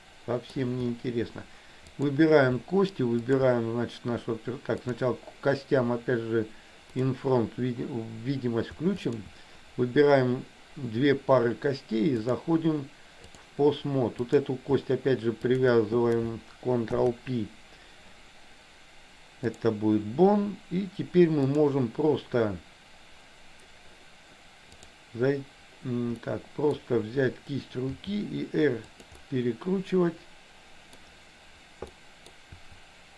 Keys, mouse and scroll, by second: 2.1 click, 3.3 shift+click, 4.9 click, 7.0 click, 9.1 shift+click, 12.4-13.5 drag, 14.3 click, 15.5 shift+click, 17.0 ctrl+p, 21.5 click, 24.9 click, 26.3 middle click, 28.0 r, 29.3-31.1 middle drag, 32.0 middle click, 32.5 r.